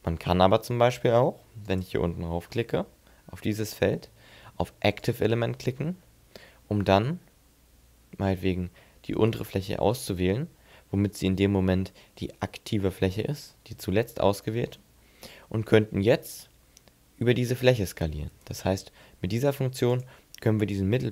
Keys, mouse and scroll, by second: 1.5 click, 5.8 middle click, 8.9 shift+right click, 9.8 shift+right click, 12.9 middle click, 13.8 shift+middle click, 15.4 s, 18.3 right click, 19.7 click.